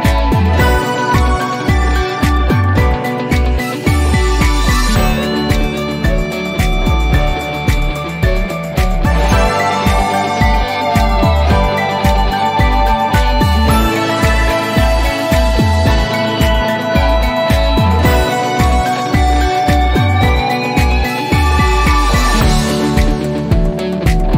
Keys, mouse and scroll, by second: 2.8 click, 6.5-8.2 scroll down 1, 9.8-11.0 drag, 11.8 6, 13.7-14.4 typing, 20.0 click.